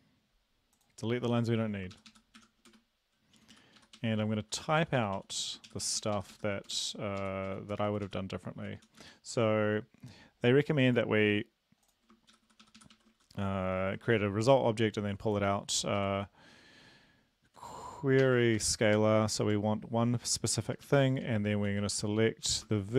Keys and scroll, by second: 1.9 shift+Up, 2.1 shift+Up, 2.7 BackSpace, 3.2 Down, 3.4 Down, 3.5 Down, 3.8 Right, 4.0 Right, 4.2 Down, 4.4 Down, 4.6 Down, 5.3 Down, 5.7 shift+Up, 6.0 shift+Up, 6.4 shift+Up, 6.7 BackSpace, 7.2 Up, 7.5 Down, 7.7 Down, 7.9 Up, 8.0 Up, 8.6 shift+Up, 8.8 shift+Up, 12.3 shift+Up, 12.5 shift+Up, 12.6 shift+Up, 12.8 shift+Up, 12.9 shift+Right, 13.7 ctrl+/, 16.0 Left, 17.5 Right, 18.2-19.0 typing, 19.4 Tab, 20.6 Left, 20.7-22.9 typing, 20.8 Right.